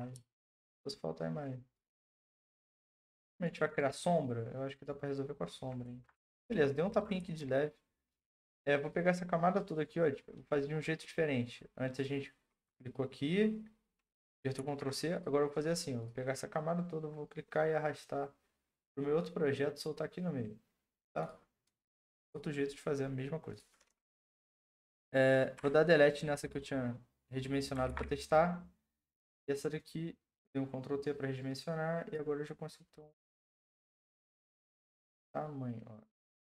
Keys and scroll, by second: 14.6 ctrl+d, 25.6 Delete, 27.9 ctrl+t.